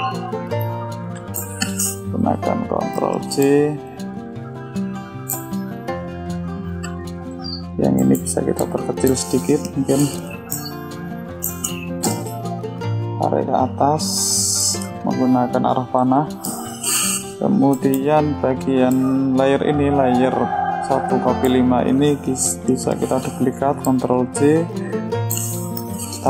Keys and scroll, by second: 3.0 ctrl+j, 18.7 ctrl+j, 25.3 ctrl+j.